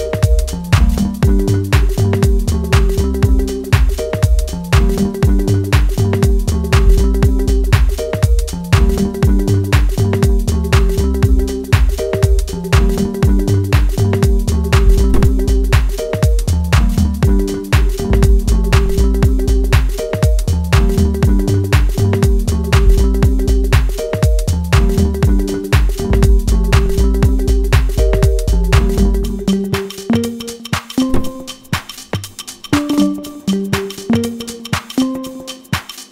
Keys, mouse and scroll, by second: 3.0-10.5 drag, 10.5-12.8 middle drag, 12.8 scroll up 1, 13.5-16.8 middle drag, 16.8 click, 18.2-18.5 scroll down 2, 18.5 shift+middle click, 19.0 scroll up 1, 19.4 click, 22.1 middle click, 23.3 scroll up 1, 23.5 middle click, 24.2 click, 29.3 click, 29.7-31.2 middle drag, 31.2 click, 33.9-35.9 middle drag, 35.9 shift+click.